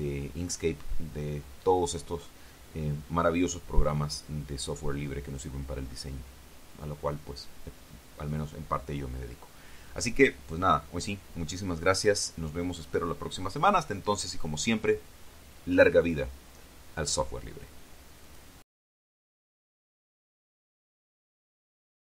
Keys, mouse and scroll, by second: 19.1 click, 21.9 click.